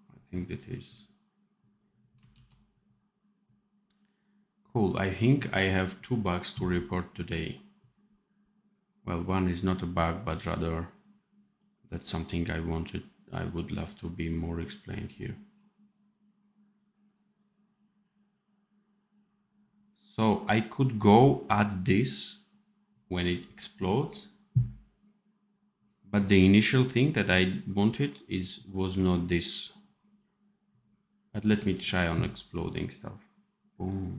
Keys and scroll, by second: 2.3 ctrl+s.